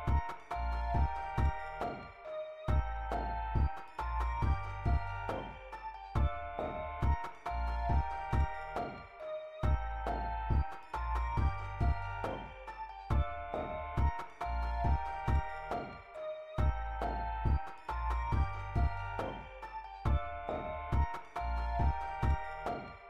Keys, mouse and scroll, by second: 0.4 click, 1.9 scroll down 1, 1.9-2.9 scroll up 3, 2.2 click, 3.4-3.8 scroll down 2, 4.0 scroll up 2, 4.6 click, 5.7 click, 5.9 click, 6.4 scroll down 2, 7.7 click, 13.6 click, 16.0 click, 21.5 click.